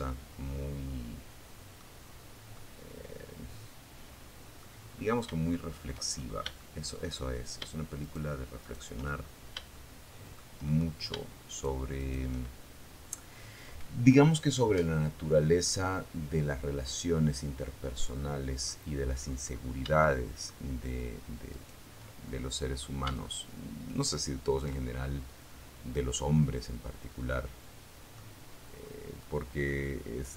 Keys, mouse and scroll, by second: 0.2 scroll down 1, 0.7-2.9 middle drag, 3.1 scroll up 1, 3.7 shift+click, 4.3-4.7 shift+scroll up 1, 4.7 shift+middle click, 6.2 shift+right click, 6.8 shift+right click, 7.3-7.8 shift+scroll up 1, 7.9 shift+middle click, 9.7 shift+right click, 10.1 shift+right click, 13.2-14.6 middle drag, 14.8-17.0 middle drag, 17.4-18.0 scroll up 1, 18.2 shift+middle click, 19.7 shift+right click, 20.5 shift+middle click, 21.4-22.6 shift+middle drag, 22.6 shift+scroll up 2, 23.0-24.1 shift+scroll down 5, 24.3-26.5 middle drag, 26.7-27.4 scroll up 1, 27.4 middle click, 28.1 middle click, 29.0 middle click, 30.0 shift+middle click.